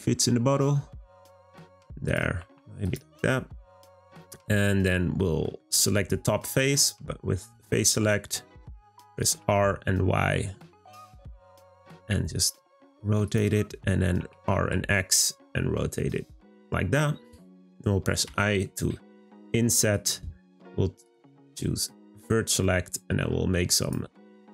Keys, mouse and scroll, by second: 2.1 click, 2.3 g, 4.2-9.2 middle drag, 9.2 r, 21.1 click, 21.9-23.9 middle drag, 23.9 click, 24.2 middle click.